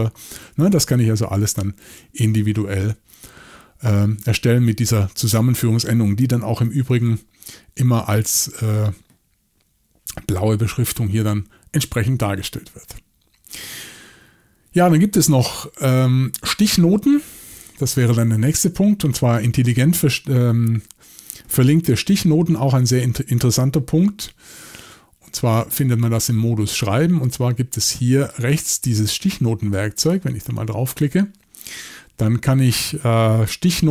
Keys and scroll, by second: 0.5 typing, 6.9 alt+a, 23.6-24.2 typing.